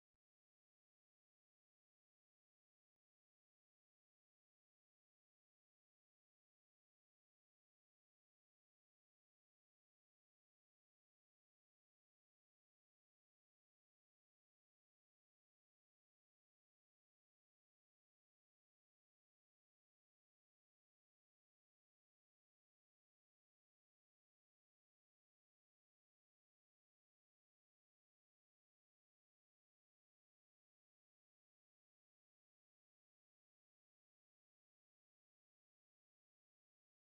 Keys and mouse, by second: 0.8 click, 1.0 g, 1.6 space, 2.7 space, 3.1 click, 3.3 space, 3.5 click, 3.7 space, 4.2 space, 5.9 space, 7.0 click, 7.2 g, 8.2 click, 8.4 space, 10.9 click, 11.8 click, 17.6 space, 18.1 click, 18.3 space.